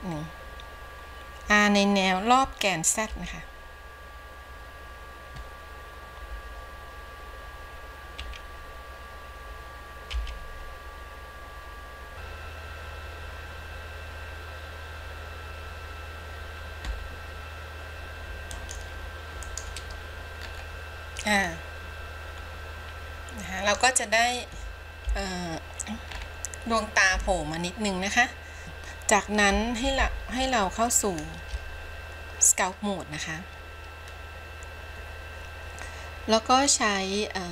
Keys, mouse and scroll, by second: 12.1 r, 19.5 click, 20.5-21.5 scroll up 2, 21.5-23.9 middle drag, 24.3-25.2 scroll down 2, 25.2 KP_3, 26.2-27.2 scroll up 3, 27.2 KP_1, 28.6 ctrl+Tab, 30.1 ctrl+Tab.